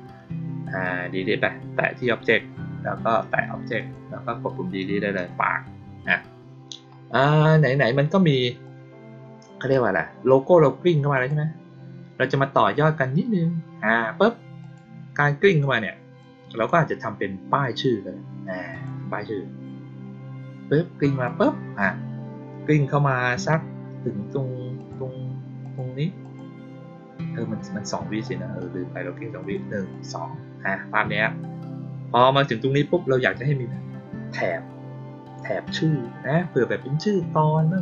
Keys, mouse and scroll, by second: 3.7 click, 8.6-9.6 drag, 11.1 click, 14.5 click, 15.4 click, 16.1-16.6 drag, 18.6 click, 21.2 click, 24.7 click, 25.5 click, 26.1 click, 28.2-28.5 drag, 29.3 click, 29.8 click.